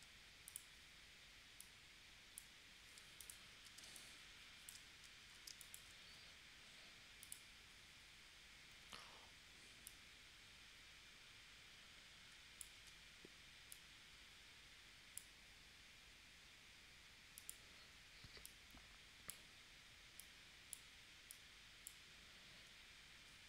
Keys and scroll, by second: 3.8 space, 5.5 space, 12.8 super+z.